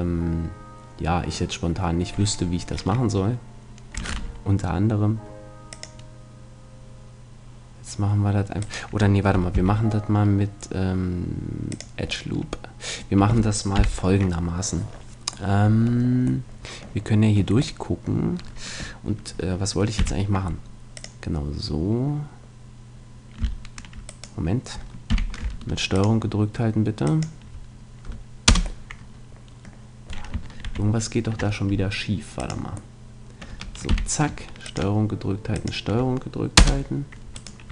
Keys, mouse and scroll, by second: 1.8-3.5 middle drag, 4.1 ctrl+r, 8.7-10.4 right drag, 9.5 x, 12.3 middle click, 13.2 a, 13.8 KP_3, 20.0 k, 25.1 k, 28.8-30.6 middle drag, 30.6 ctrl+z, 32.4 click, 33.9 k, 37.4-37.7 right drag.